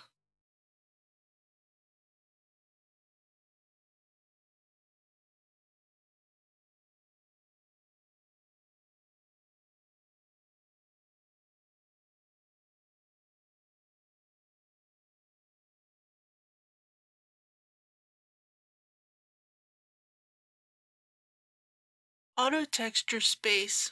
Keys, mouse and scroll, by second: 11.3 ctrl+c, 12.2 click, 15.7 ctrl+v, 18.2-20.4 drag, 20.8-21.5 scroll up 1, 21.5 click.